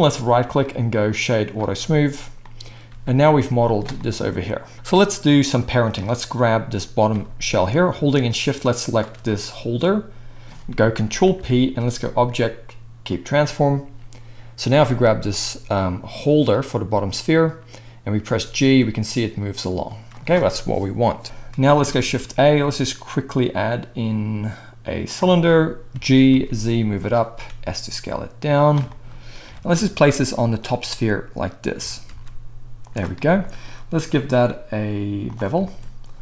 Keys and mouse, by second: 1.5 drag, 1.8-3.8 right drag, 3.1 g, 3.8-8.7 middle drag, 7.1 g, 8.7 shift+click, 9.1-10.8 middle drag, 11.2 ctrl+p, 13.0 middle click, 14.7-15.3 drag, 18.2 g, 21.2 shift+KP_1, 22.0 shift+middle click, 22.0 shift+a, 25.9 g, 27.3 s, 29.4 g, 30.7 s, 31.8 g, 32.4-34.0 middle drag, 34.0-36.2 drag.